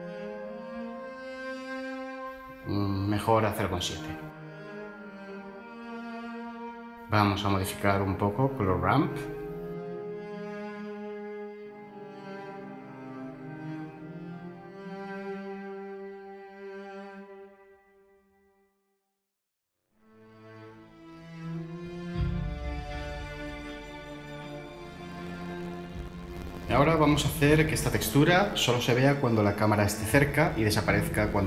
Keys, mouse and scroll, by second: 4.2 typing, 4.6 Return, 31.2 ctrl+shift+a.